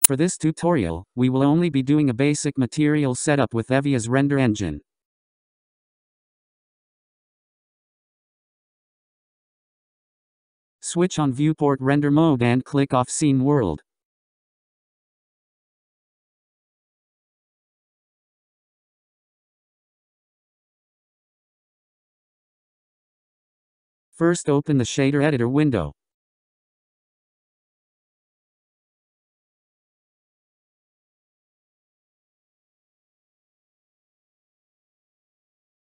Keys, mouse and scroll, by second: 2.7 click, 6.1 click, 11.3 click, 12.2-15.3 drag, 18.8 scroll down 2, 19.5-22.5 middle drag, 26.9-30.0 drag, 30.3-30.7 scroll down 9, 31.5-36.0 drag.